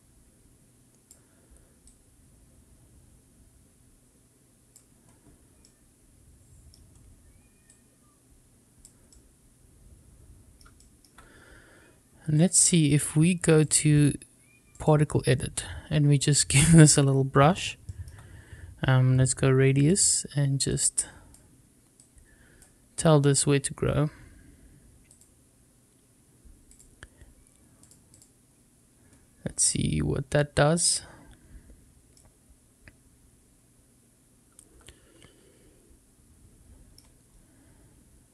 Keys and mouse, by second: 1.9-4.7 drag, 5.6-6.6 middle drag, 7.6-8.8 drag, 9.1-10.5 middle drag, 13.6-15.0 drag, 19.3 click, 20.7-21.3 drag, 22.0-22.5 drag, 26.6 click, 27.7 click, 32.1-36.9 middle drag.